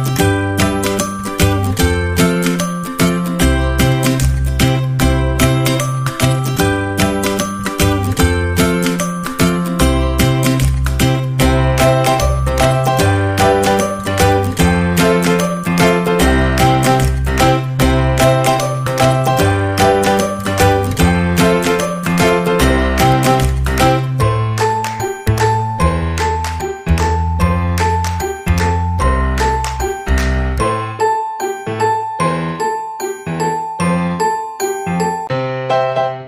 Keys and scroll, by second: 20.2 space, 26.5 ctrl+q, 33.0 space.